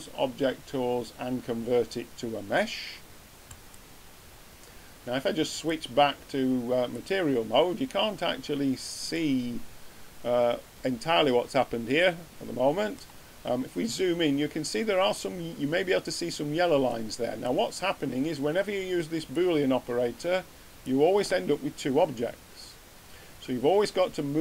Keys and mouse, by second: 5.5-7.5 drag, 10.4 middle click.